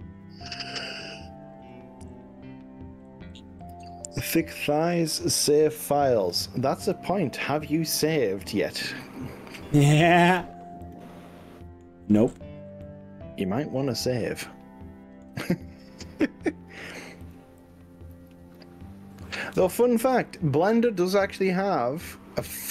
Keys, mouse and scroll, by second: 0.2-0.7 scroll up 2, 1.6-2.0 scroll down 3, 2.2-2.6 scroll up 3, 3.2-3.8 scroll down 4, 4.1-4.8 scroll up 3, 6.4 scroll up 1, 7.0 scroll down 2, 10.4 click, 11.0 click, 11.3 middle click, 12.2-12.8 scroll down 5, 12.8-15.2 middle drag, 15.9 ctrl+s.